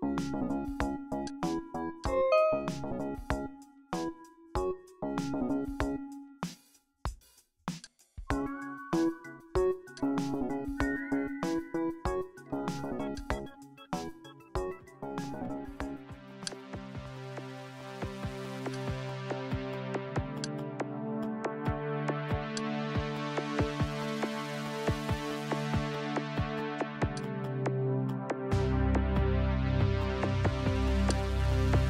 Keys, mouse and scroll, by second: 1.3-4.3 drag, 3.7 KP_5, 4.5 KP_Enter, 7.9 click, 10.0 click, 13.2 click, 16.5 click, 18.8 click, 20.2 click, 22.6-25.5 drag, 27.2 click, 31.1-31.8 drag.